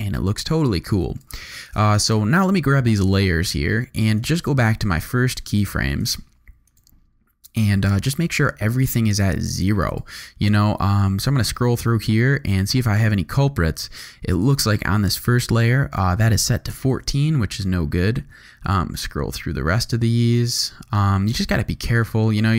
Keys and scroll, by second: 1.2 space, 2.9 u, 16.7 0, 16.9 Return.